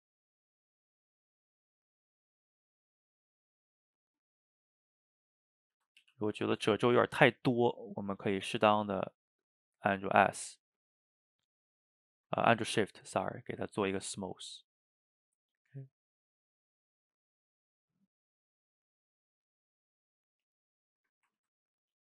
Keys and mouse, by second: 3.5 click, 3.9 middle click, 4.5 shift+click, 5.1 middle click, 5.8 ctrl+z, 6.1 f, 6.7-8.1 shift+middle drag, 8.1 shift+click, 8.7 ctrl+z, 9.0-10.5 shift+drag, 10.5-11.9 middle drag, 11.9 shift+click, 12.5 ctrl+z, 12.8 shift+click, 13.3 middle click, 13.9-15.2 shift+drag, 15.2-17.0 middle drag, 17.0 shift+click, 17.9 middle click, 18.6-20.1 shift+drag, 20.1 middle click, 20.9 shift+click, 21.4 ctrl+z, 21.9 shift+click.